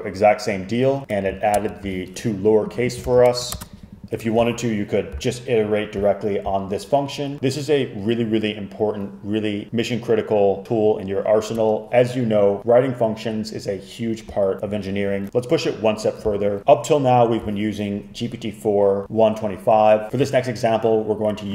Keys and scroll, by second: 1.6 super+Return, 3.1 super+f, 3.3 Return, 4.2 Escape.